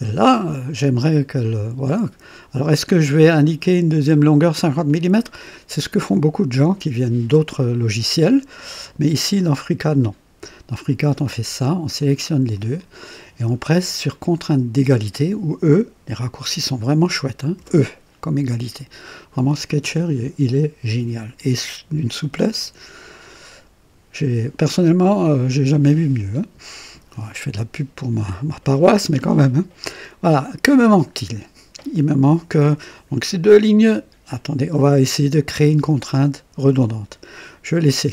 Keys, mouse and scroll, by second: 3.9 click, 8.7 click, 10.9 click, 12.5 click, 17.5 e, 37.8 click.